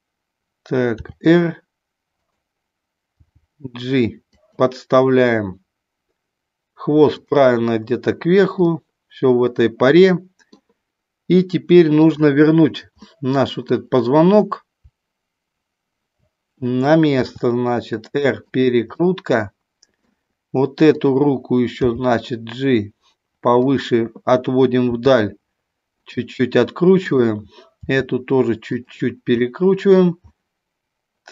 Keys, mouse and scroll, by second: 1.0 r, 2.2 click, 3.2 g, 4.3 click, 7.1 click, 8.7-10.5 middle drag, 11.8 click, 13.1 middle click, 17.1 r, 19.0-20.1 middle drag, 21.0 click, 21.7 g, 25.0 r, 27.0 click, 28.7 click, 29.4 middle click, 30.2-31.3 middle drag.